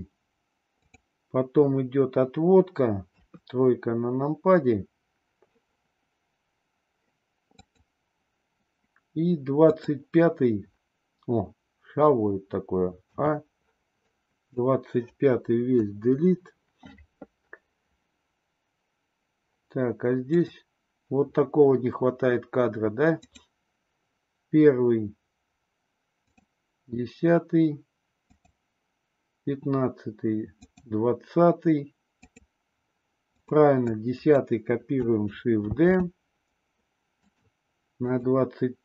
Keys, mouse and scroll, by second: 0.7 click, 3.0 KP_3, 7.6 click, 9.6 click, 13.1 a, 13.9-14.5 drag, 15.7 Delete, 20.3 click, 23.1 click, 26.2 click, 28.3 click, 30.6 click, 32.2 click, 33.3 drag, 33.8-34.2 drag, 35.7 shift+d, 37.9 click.